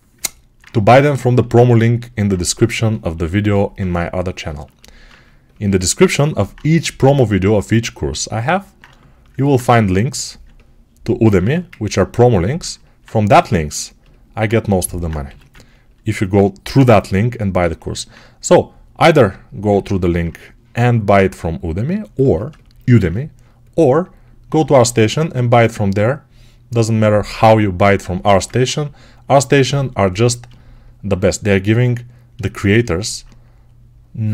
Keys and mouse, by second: 1.3-4.3 alt+drag, 4.3-17.5 alt+shift+right drag, 9.4 2, 11.3 1, 15.1 g, 22.2-28.0 alt+shift+drag.